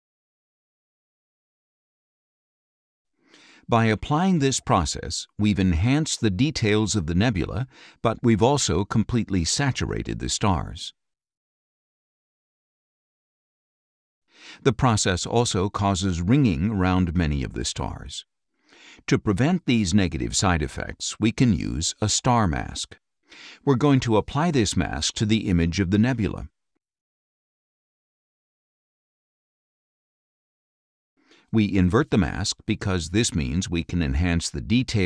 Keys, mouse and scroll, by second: 0.4 click, 5.0 click, 6.5-7.9 drag, 9.7-12.8 drag, 13.6-14.6 scroll down 6, 15.9 click, 18.4-20.6 drag, 22.0-24.6 drag, 25.7-28.3 drag, 29.4 click, 31.7 click, 34.8-35.0 drag.